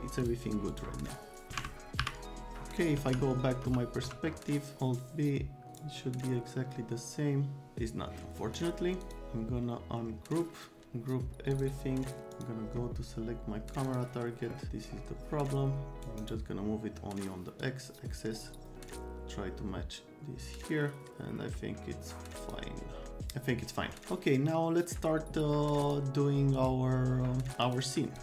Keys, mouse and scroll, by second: 0.2 click, 0.7 click, 2.0 Delete, 2.9 c, 3.6 F3, 4.1 F3, 5.7 click, 9.0 click, 11.5 click, 12.3 click, 13.8 click, 14.7-16.3 drag, 16.1 scroll down 2, 17.6-22.5 drag, 23.0 right click, 25.9 click, 26.6 click, 27.6 click, 28.1 click.